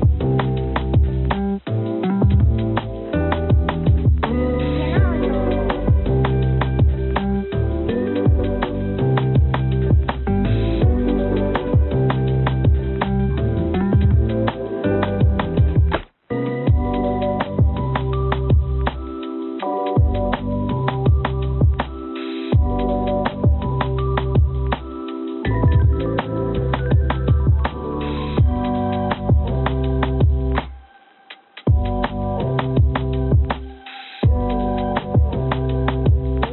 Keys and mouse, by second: 3.2 s, 4.3 r, 9.5-10.8 drag, 11.6 click, 13.9 click, 15.7 click, 16.5 shift+d, 19.5 click, 20.5 click, 21.8 g, 23.5 s, 25.3 g, 27.3 g, 29.9 g, 32.3 click, 33.3 click.